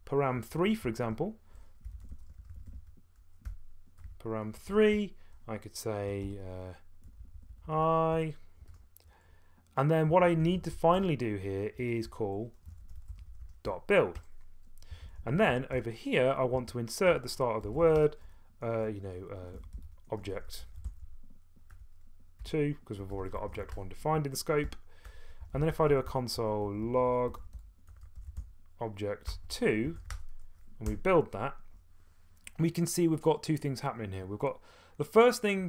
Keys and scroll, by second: 0.4 Left, 0.8 Delete, 1.1 Right, 1.6-9.2 typing, 10.1 Return, 10.4 Tab, 10.9 Tab, 11.8-26.9 typing, 13.6 Return, 16.6 Escape, 29.0-30.5 typing, 30.9 F2.